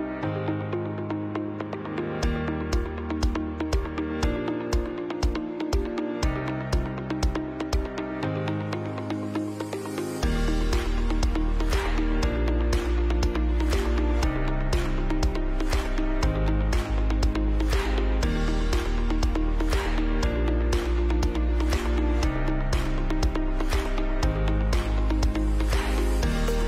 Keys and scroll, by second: 6.7 ctrl+alt+z, 11.4 Up, 11.5 Up, 11.7 Right, 11.8 Up, 12.7 ctrl+alt+space, 13.6 Delete.